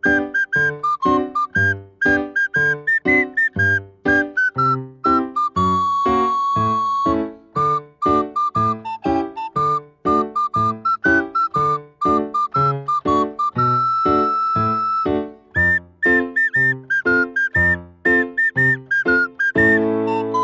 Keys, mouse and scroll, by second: 1.6 click, 1.8-4.9 drag, 8.2 click, 9.2 scroll down 2, 10.9-13.9 drag, 14.5-19.4 drag, 19.4-20.4 middle drag.